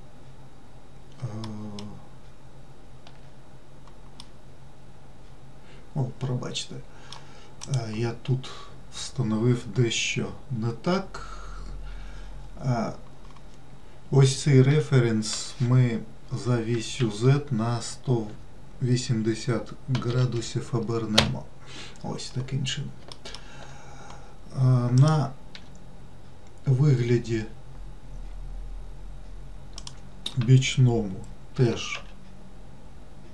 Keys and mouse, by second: 1.7 alt+middle click, 4.5-7.5 middle drag, 8.0 click, 15.0 r, 23.4 alt+middle click, 25.3 click, 25.9 g, 31.9 s.